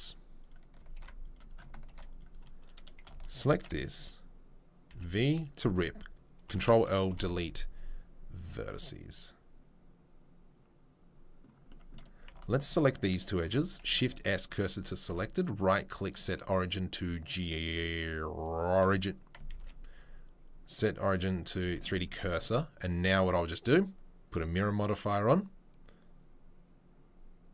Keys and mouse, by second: 0.8-12.7 ctrl+middle drag, 0.9 ctrl+r, 1.8 ctrl+r, 4.9 v, 6.4 ctrl+l, 7.1 Delete, 12.5 alt+click, 13.5-21.6 shift+middle drag, 13.8 shift+s, 15.1 Tab, 15.3-19.3 right drag, 19.3 ctrl+click, 19.6 ctrl+z, 19.6-23.2 right drag, 25.0-27.5 drag, 25.0-27.5 right drag.